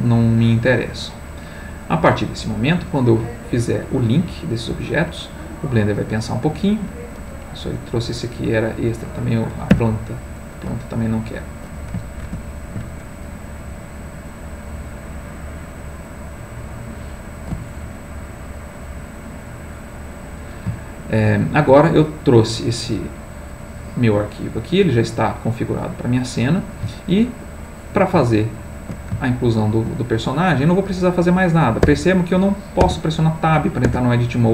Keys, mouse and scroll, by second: 3.6 click, 6.2-7.6 middle drag, 7.8 click, 9.7 x, 10.4 click, 12.2 ctrl+z, 13.0 ctrl+click, 13.9 click, 14.4 click, 17.5 x, 18.5 click, 20.4-30.6 middle drag, 30.6-31.9 drag, 31.9 Tab, 32.8 Tab, 33.8 Tab, 34.4 click.